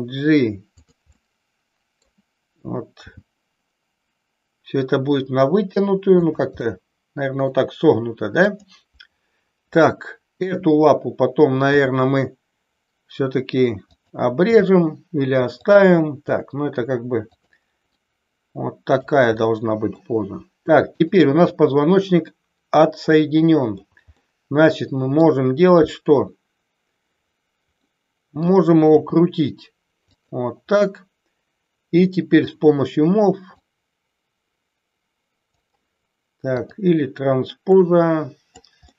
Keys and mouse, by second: 0.8 click, 1.1-2.0 middle drag, 2.9 g, 6.1 click, 6.6-7.4 middle drag, 8.4 click, 10.4 e, 11.6 r, 13.9 click, 14.5 g, 16.1 r, 17.3 click, 17.9-19.0 middle drag, 19.4-19.8 middle drag, 21.5-23.8 middle drag, 24.1-25.1 middle drag, 27.9 middle click, 28.9 r, 30.1 click, 32.3 click, 33.5-35.5 drag, 36.5 click, 37.6-38.6 drag, 38.8-38.9 middle drag.